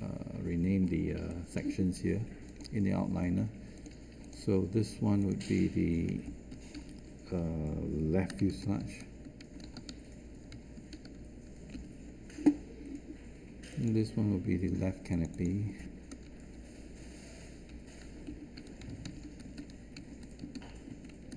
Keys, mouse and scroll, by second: 8.1-10.1 typing, 11.7 Return, 18.2 BackSpace, 19.4 Caps_Lock, 19.9-21.3 typing, 20.8 Caps_Lock.